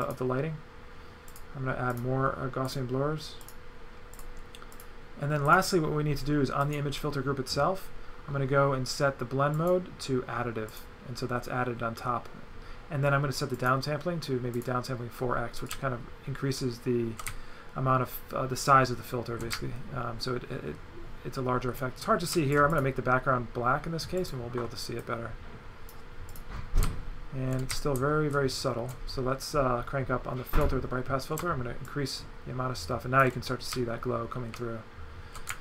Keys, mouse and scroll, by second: 0.1 click, 1.3 click, 1.9 click, 2.7 click, 3.4 click, 4.2 click, 4.8 click, 5.5 click, 6.6 click, 9.6 click, 10.7 click, 13.6 click, 14.6 click, 15.7 right click, 22.7 click, 24.2 click, 25.1 click, 26.3 click, 26.8 a, 26.9 right click, 30.6 click, 31.9 shift+click, 33.7 right click.